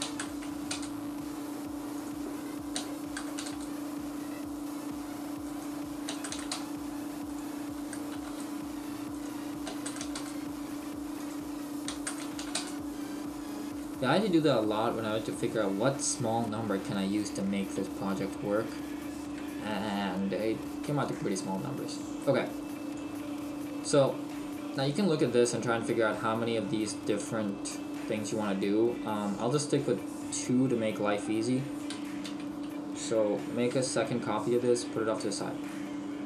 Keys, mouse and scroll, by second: 2.0 click, 5.5 click, 7.3 click, 9.2 click, 11.3 click, 14.0-14.3 scroll up 1, 15.9 scroll up 1, 16.4-17.3 scroll up 2, 17.3 shift+middle click, 20.2-21.0 scroll up 1, 21.0 shift+middle click, 22.6 click, 23.4-23.9 scroll up 1, 24.1 scroll down 1, 24.9 scroll down 1, 26.5-26.9 scroll down 1, 26.9 shift+middle click, 29.4 click, 32.3 shift+d, 34.8 click, 35.1 right click.